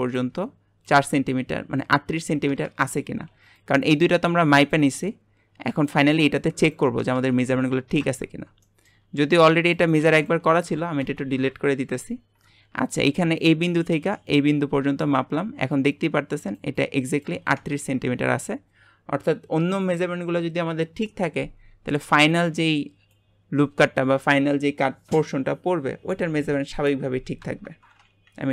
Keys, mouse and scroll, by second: 8.0 Tab, 8.6 shift+middle click, 9.0 scroll up 1, 9.7 click, 10.6 Delete, 11.0 Delete, 13.3-17.8 ctrl+drag, 28.3 Delete.